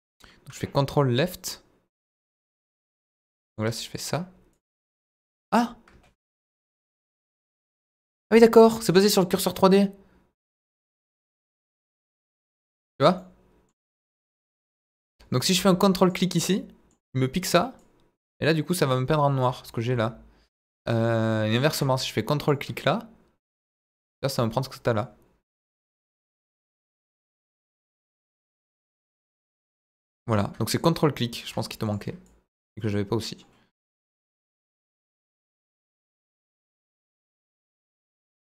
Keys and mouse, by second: 1.0-2.2 ctrl+drag, 2.5-2.9 drag, 3.1-3.6 middle drag, 4.5-5.2 drag, 6.2 ctrl+z, 6.8 ctrl+drag, 7.4-8.3 drag, 8.6 ctrl+z, 8.9-9.5 middle drag, 11.2-11.6 middle drag, 11.7-12.5 drag, 12.7 ctrl+z, 13.1-13.6 middle drag, 14.0-14.6 drag, 14.7 ctrl+z, 15.1-15.5 middle drag, 16.5-16.9 middle drag, 17.8-19.4 drag, 19.9 ctrl+z, 20.9-21.6 middle drag, 22.8-23.5 middle drag, 23.7-24.3 drag, 24.9-25.9 drag, 26.1 ctrl+z, 26.2 ctrl+z, 26.5-27.3 drag, 27.4 ctrl+z, 28.2-28.6 middle drag, 28.7-29.5 drag, 29.7 ctrl+z, 30.7-31.4 drag, 32.2-32.6 drag, 32.8-33.4 middle drag, 34.4-34.8 middle drag, 35.7-36.7 drag, 36.9-37.5 middle drag.